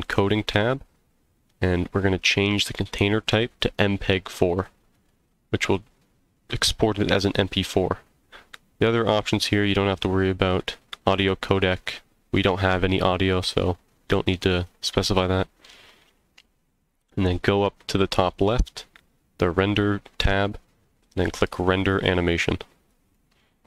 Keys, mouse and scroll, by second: 0.1-0.5 scroll down 2, 1.1-2.4 scroll down 1, 2.6-3.5 drag, 7.2 scroll down 2, 14.3-14.7 scroll up 2, 15.1 scroll up 1, 18.3 click.